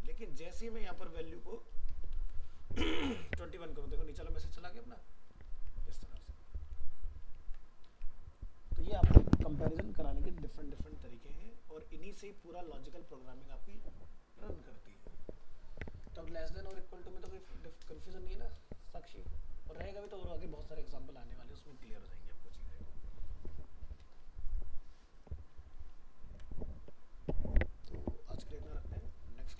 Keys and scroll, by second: 2.1 ctrl+s, 3.0 alt+Tab, 6.2 ctrl+z, 7.9 alt+Tab, 25.7 ctrl+s.